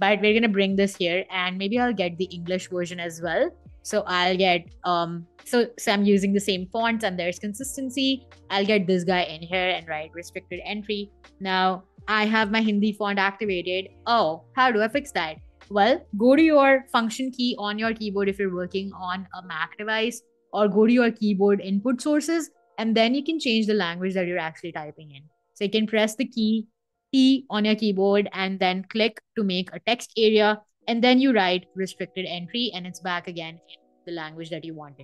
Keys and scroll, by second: 5.5 super+c, 5.8 Escape, 10.0 super+a, 10.4-11.6 typing, 14.8 Escape, 15.0 BackSpace, 24.1 Escape, 25.1 t, 30.8-33.9 typing, 34.1 Escape.